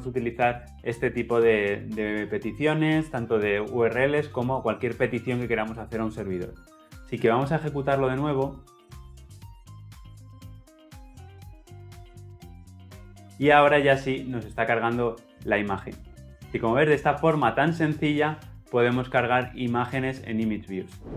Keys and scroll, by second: 8.5 shift+F10.